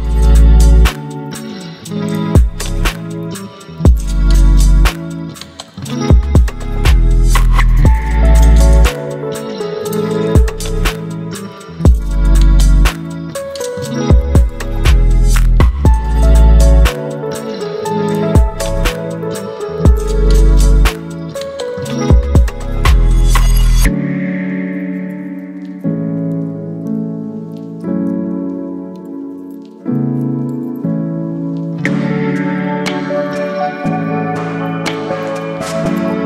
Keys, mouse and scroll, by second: 2.9 ctrl+x, 4.0 ctrl+v, 5.4 v, 6.0-7.6 drag, 11.1-15.1 typing, 12.4 click, 13.5 click, 15.6 Return, 16.1 click, 16.3-17.8 typing, 18.1 click, 21.5 ctrl+t, 23.0-23.9 drag, 27.6 ctrl+t, 29.5-30.4 drag.